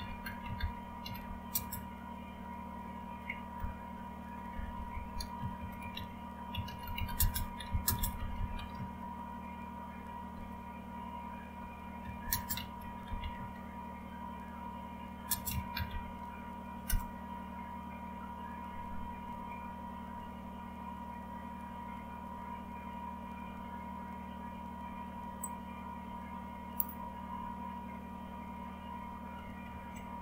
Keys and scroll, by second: 0.0-1.6 typing, 3.3-13.8 typing, 15.2-17.4 typing, 19.4 alt+Tab, 19.4 typing, 23.0-23.8 typing, 29.6-30.2 typing.